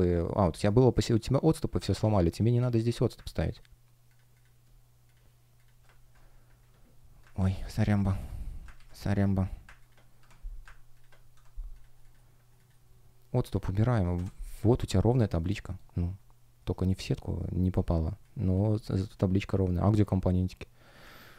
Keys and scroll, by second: 1.8 super+z, 2.6 super+z, 6.4 Delete, 7.3 super+z, 8.1 Delete, 8.6 super+z, 10.1 Delete, 11.3 Delete, 11.9 shift+Return, 14.1 Return, 14.7-18.0 typing.